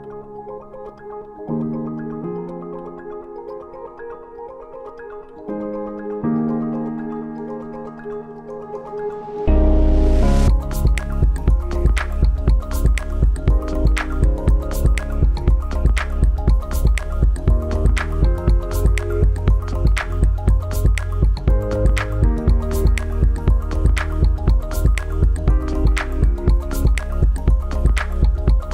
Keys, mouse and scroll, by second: 3.2 scroll down 1, 3.2 scroll up 1, 3.4 scroll down 1, 3.7 scroll up 1, 3.9-5.9 scroll down 1, 6.4 click, 10.1 click, 12.6 click, 15.7 click, 21.1 click, 26.2 click, 28.4 click.